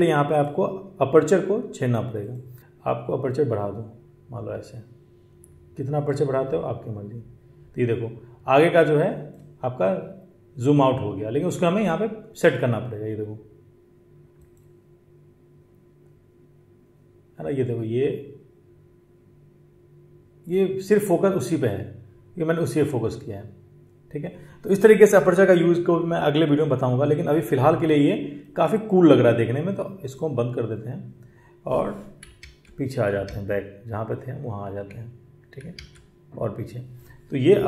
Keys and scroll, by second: 32.2 ctrl+z, 32.3 ctrl+z, 33.1 ctrl+z, 35.6 ctrl+z.